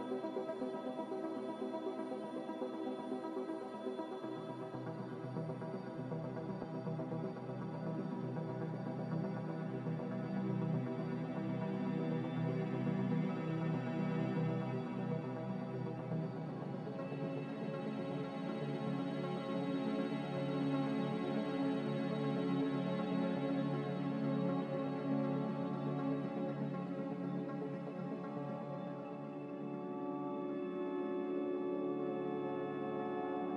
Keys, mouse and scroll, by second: 0.1 Return, 16.6 ctrl+s, 24.8 Escape, 24.9 Escape, 26.8 ctrl+s.